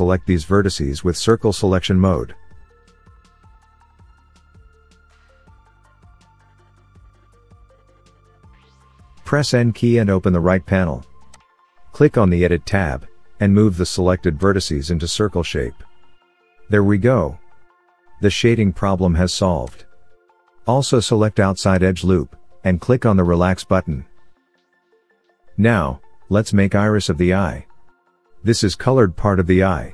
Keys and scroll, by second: 0.2 c, 9.8 n.